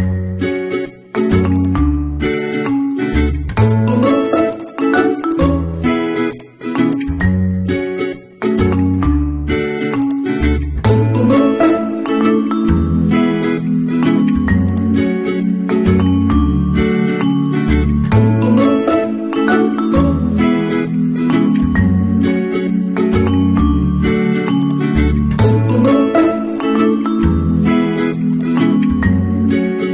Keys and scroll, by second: 2.7 ctrl+z, 7.4 ctrl+t, 9.0 Return, 27.1 BackSpace.